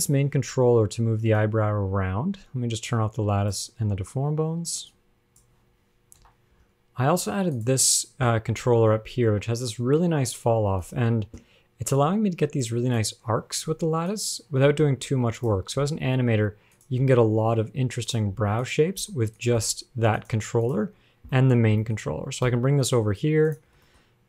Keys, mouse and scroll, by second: 0.1 r, 2.0 r, 3.1 click, 5.3 shift+click, 6.4 KP_1, 7.0 scroll up 4, 7.7 click, 8.8 g, 12.0-12.9 scroll up 1, 12.9 click, 14.3 click, 14.9 g, 16.1 g, 17.2 g, 18.6 g, 19.2 g, 19.8 g, 20.8 click, 21.2-21.6 scroll down 10, 21.6 shift+middle click, 22.1 shift+middle click, 22.3-22.7 scroll up 1, 22.7 g, 24.1 shift+middle click.